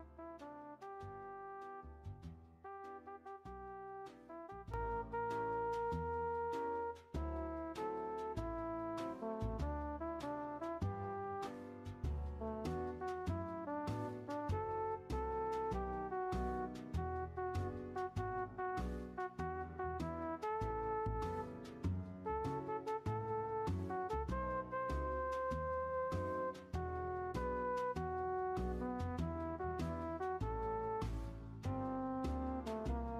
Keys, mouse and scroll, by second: 5.2-6.0 middle drag, 6.0-6.4 scroll up 1, 6.4-7.0 middle drag, 7.0-8.3 scroll up 1, 8.3-13.5 drag, 13.5 scroll up 1, 13.6-14.8 middle drag, 14.8-15.2 drag, 15.2-15.8 scroll down 1, 15.8-17.1 middle drag, 17.1-26.3 drag, 28.5 scroll up 1, 28.6-33.0 middle drag, 33.0-33.1 drag.